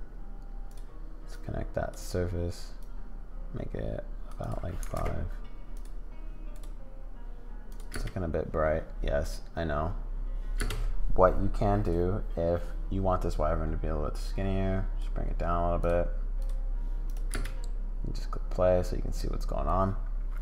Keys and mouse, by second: 1.3 click, 2.8-5.6 drag, 7.9 space, 9.3 click, 10.6 space, 11.8 click, 13.4-15.0 drag, 17.1 click, 17.3 space.